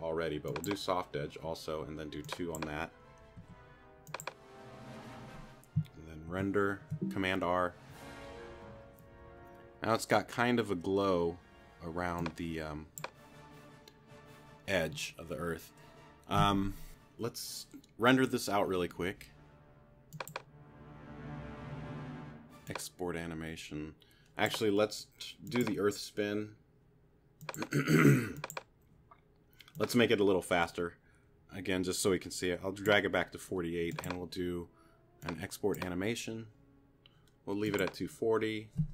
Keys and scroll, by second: 3.4 2, 6.3 super+r.